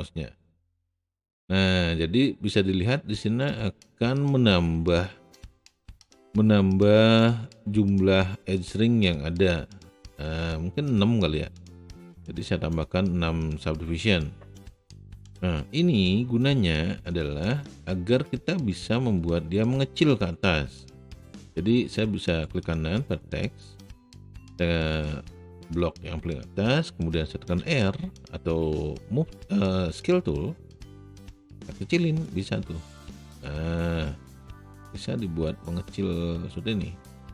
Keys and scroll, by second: 27.5 r.